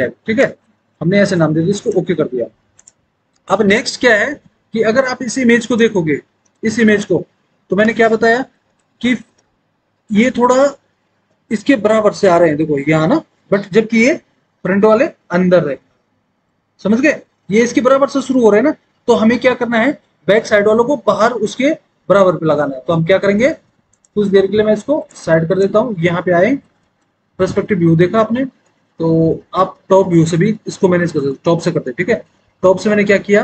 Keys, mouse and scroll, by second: 0.0-0.5 typing, 27.1 alt+w, 27.6 alt+w, 30.6 alt+w, 31.4 alt+w.